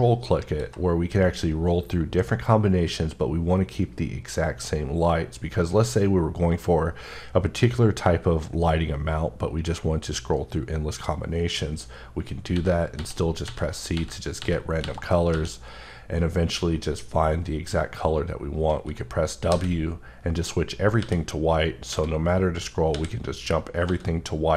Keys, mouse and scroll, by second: 0.5 click, 1.2 scroll up 1, 1.8 scroll up 1, 2.4 scroll up 1, 3.1 scroll up 1, 3.9 scroll up 2, 4.8 scroll up 1, 5.4 scroll up 1, 6.3-6.8 scroll up 2, 8.1 scroll up 1, 8.8 scroll up 1, 9.4 scroll up 1, 10.5-11.5 scroll up 1, 12.5-15.3 typing, 17.2 scroll up 1, 18.1 scroll up 1, 19.5 w, 20.5 scroll up 1, 21.0 w, 21.4 scroll up 1, 21.9 w, 22.6 scroll up 1, 22.9 w, 23.4 scroll up 2, 23.8 w, 24.4 scroll up 2.